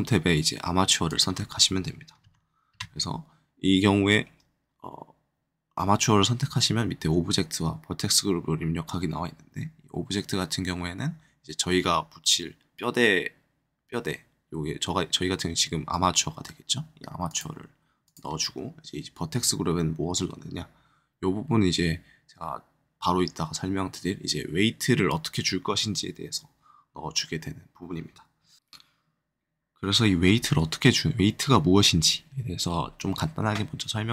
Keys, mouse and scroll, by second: 1.0-2.5 drag, 2.2 KP_Add, 2.7 KP_Add, 17.2-22.0 drag, 28.6 click.